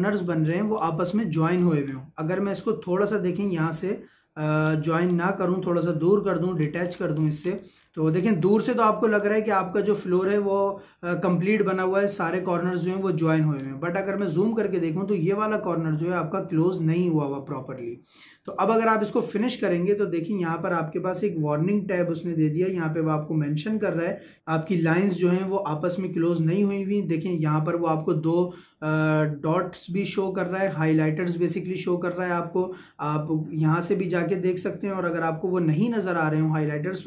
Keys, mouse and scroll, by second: 1.3 click, 1.5-2.0 scroll up 1, 2.7-5.0 drag, 5.0-5.4 scroll up 1, 6.0 Escape, 6.5-7.4 scroll down 1, 8.7 middle click, 8.9 scroll down 1, 13.6-14.2 scroll up 1, 18.2-18.6 scroll down 1, 18.6 middle click, 19.4 click.